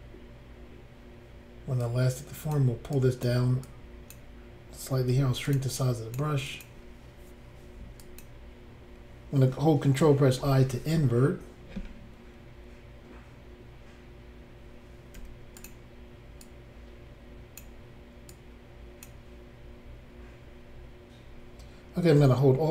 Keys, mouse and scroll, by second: 1.8 click, 3.0 click, 3.7 click, 5.1 f, 5.5 click, 5.6 click, 5.8 click, 6.5 click, 6.7 click, 8.0 click, 8.2 click, 10.4 ctrl+i, 15.2 f, 15.6 click, 15.7 click, 16.4 click, 18.3 click.